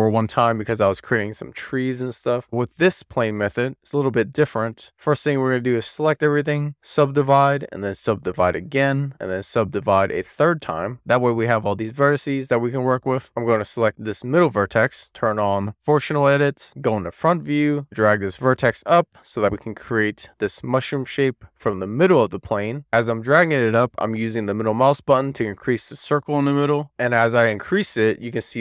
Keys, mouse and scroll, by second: 3.6-4.6 right drag, 4.6 click, 4.8 Tab, 6.6 1, 6.7-8.4 right drag, 8.5-12.0 right drag, 12.0-13.8 scroll down 1, 13.8 click, 16.5 click, 17.4 alt+middle click, 17.8 middle click, 22.1 click, 23.3-24.6 scroll down 7, 24.6-25.5 scroll down 4, 25.8-26.6 scroll down 3.